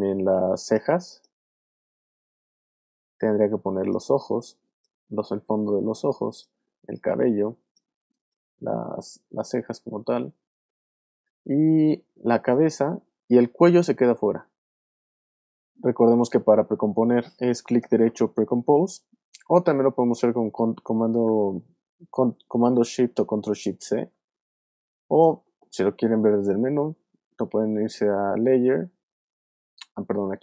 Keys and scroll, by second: 23.8 shift+super+c.